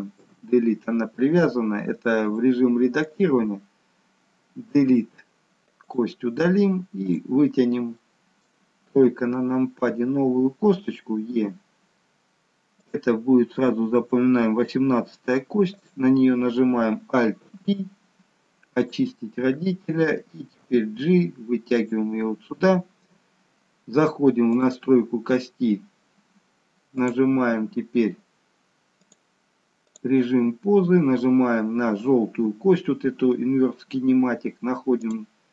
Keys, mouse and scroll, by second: 0.2 Delete, 2.3 click, 4.8 Delete, 7.1 click, 8.0 middle click, 9.0 KP_3, 11.3 e, 15.8 click, 17.5 alt+p, 20.7 g, 24.6 click, 27.1 click, 35.2 click.